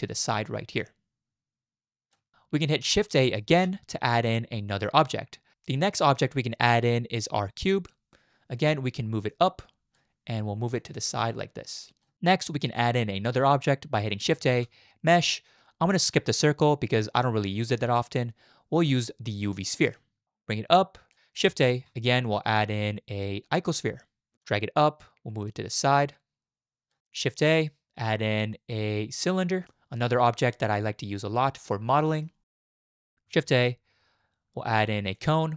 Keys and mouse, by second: 3.5 shift+a, 9.3 click, 10.8-12.0 drag, 14.4 shift+a, 20.6 click, 21.7 shift+a, 24.4 click, 25.6-26.9 drag, 27.0 middle click, 27.4 shift+a, 30.4 click, 31.7 middle click, 32.6 click, 33.0 shift+click, 33.4 shift+a.